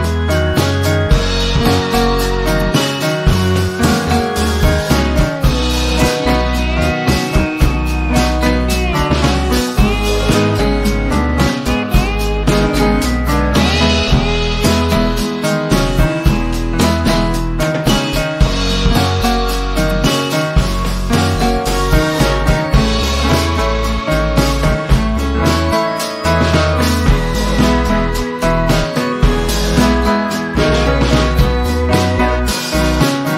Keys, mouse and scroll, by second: 0.1 p, 1.4 click, 8.7 v, 10.0-19.0 drag, 21.1-22.0 drag, 25.7 p, 27.4 click.